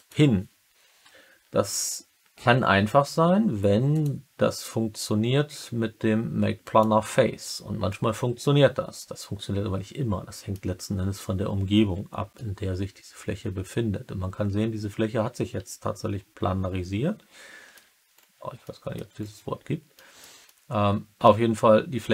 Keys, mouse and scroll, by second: 3.9-6.7 drag, 7.8-10.5 alt+middle drag, 12.3-17.7 alt+middle drag, 18.6 middle click, 19.9 middle click, 20.4-22.1 alt+middle drag.